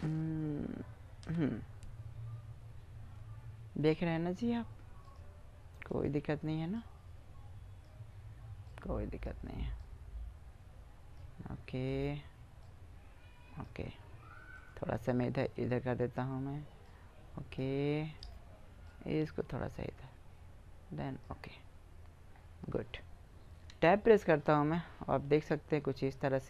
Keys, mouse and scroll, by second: 1.0 v, 5.8-7.6 right drag, 6.5-7.9 drag, 10.7 click, 11.7-14.1 right drag, 12.4 click, 14.4-16.0 right drag, 15.1 click, 17.2 click, 20.3 middle click, 21.4-23.5 middle drag, 23.5 Tab, 25.8 middle click.